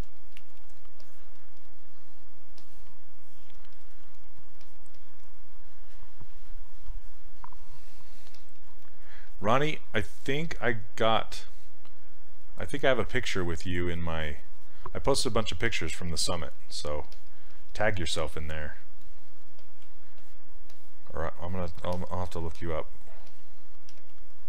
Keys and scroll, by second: 23.3 s, 24.0 s.